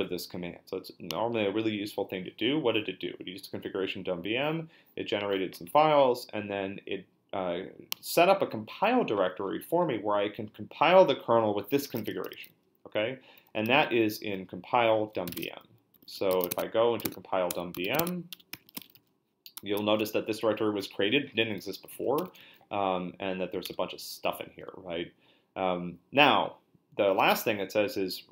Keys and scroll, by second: 15.0-19.6 typing, 17.0 Tab, 18.0 Tab, 21.7-22.9 typing, 23.6 Return.